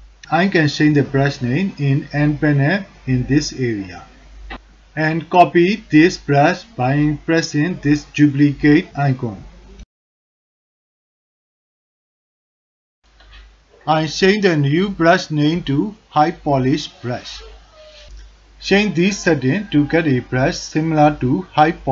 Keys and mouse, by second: 8.9 click, 11.3-14.4 drag, 15.3-18.6 drag, 20.8 alt+click, 21.2 ctrl+alt+click, 21.7 alt+shift+click.